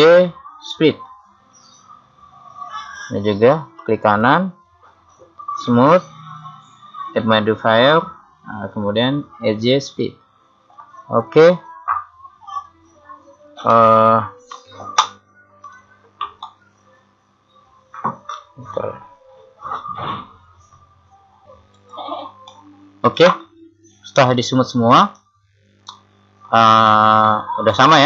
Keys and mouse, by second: 3.9 right click, 5.7-9.2 drag, 22.6 middle click.